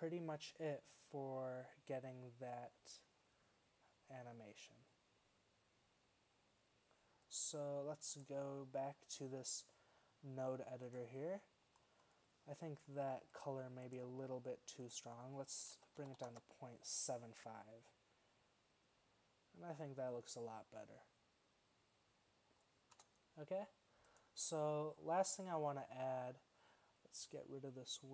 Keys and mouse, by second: 11.8-12.2 middle drag, 12.2-13.4 drag, 23.2 space.